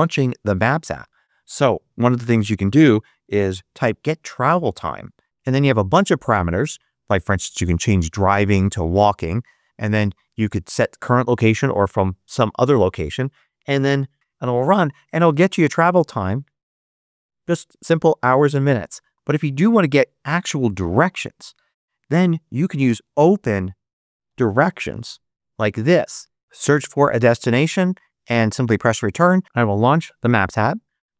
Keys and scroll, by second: 1.7-3.8 typing, 14.1 Return, 22.4-24.9 typing.